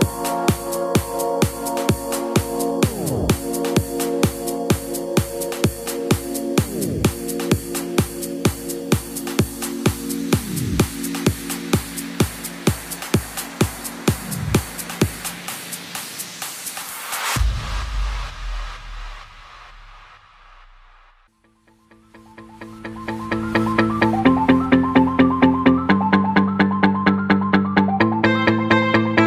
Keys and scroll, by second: 22.3 alt+super+z, 22.6 alt+super+z, 22.8 alt+super+z, 23.0 alt+super+z, 23.3 alt+super+z, 23.5 alt+super+z, 29.0 alt+super+z.